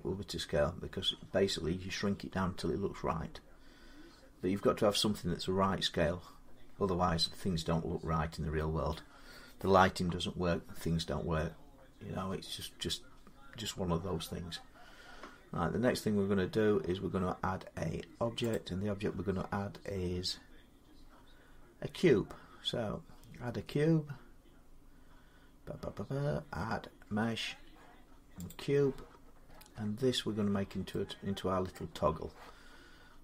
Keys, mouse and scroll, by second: 18.3-23.4 drag, 28.3-31.2 drag, 29.0-30.7 scroll, 31.2 scroll down 10, 31.5-33.2 middle click.